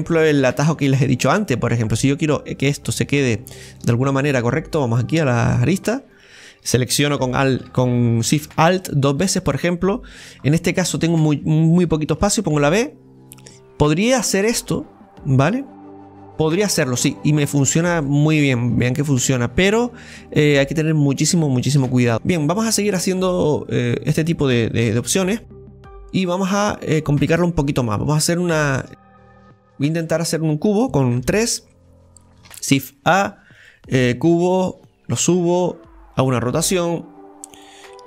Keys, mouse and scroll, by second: 0.4-2.6 middle drag, 2.6 right click, 3.5-3.8 scroll up 1, 3.8-4.9 shift+middle drag, 4.9 click, 6.0-7.2 right drag, 8.7-10.4 alt+shift+right drag, 10.4-12.2 scroll up 2, 12.2-14.2 scroll up 1, 14.2 ctrl+b, 14.2 click, 14.6 scroll down 2, 15.6 scroll down 2, 15.6-16.7 middle drag, 17.1 Tab, 17.1-19.9 middle drag, 19.9-20.5 scroll down 1, 20.5-21.8 middle drag, 21.8 click, 22.1 middle click, 22.4 scroll down 2, 22.6-24.8 middle drag, 24.8 Tab, 25.2-25.5 scroll up 2, 25.5-28.3 scroll down 4, 26.1-28.3 middle drag, 28.3 scroll down 1, 28.6-31.1 shift+middle drag, 31.1 KP_3, 32.5 shift+a, 34.9-36.8 drag, 36.8 r.